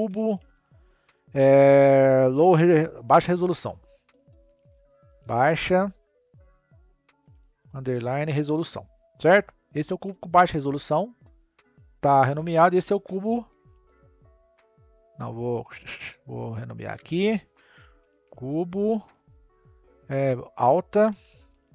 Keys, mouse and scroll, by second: 11.6 click, 13.4 shift+c, 13.6 u, 16.8-20.1 drag.